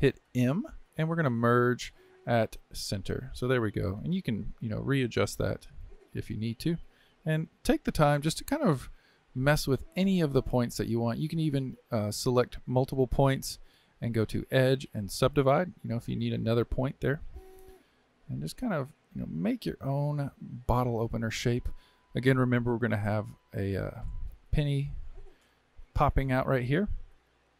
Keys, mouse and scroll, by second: 0.4 m, 7.2 click, 7.4 g, 10.8-12.2 shift+middle drag, 12.2 click, 14.2-16.3 drag, 17.2 g, 19.2-23.8 middle drag, 23.8 KP_3, 25.2 KP_3, 26.0 scroll down 2.